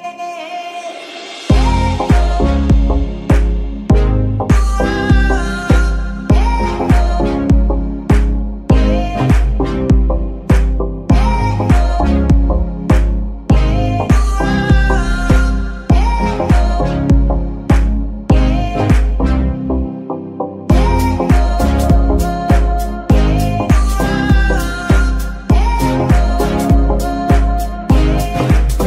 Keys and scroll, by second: 3.0 z, 18.4 z, 27.3 ctrl+Tab.